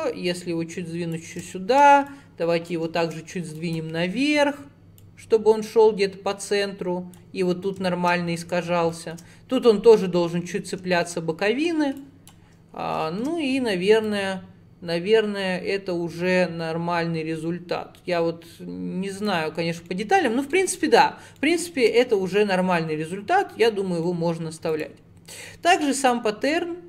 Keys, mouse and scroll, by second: 1.5 shift+middle click, 2.1 click, 3.0 shift+middle click, 3.2-3.6 scroll down 1, 3.6 click, 4.1-5.0 scroll up 2, 5.0 click, 7.5 scroll down 3, 7.9 shift+middle click, 8.1 scroll down 2, 8.6 scroll up 1, 8.9 shift+middle click, 9.3-10.5 scroll up 3, 10.5-11.0 scroll down 3, 11.0 shift+middle click, 11.7-12.0 scroll down 2, 12.0 click, 12.5-12.9 scroll up 6, 13.0 shift+middle click, 13.4-14.1 scroll up 3, 14.1 click, 19.6 scroll down 1, 19.9 middle click, 20.3-20.6 scroll down 2, 20.6-21.8 middle drag, 21.8 Tab, 22.0-24.2 middle drag, 24.2-24.7 scroll up 1, 24.7 click, 26.1-26.8 scroll down 11.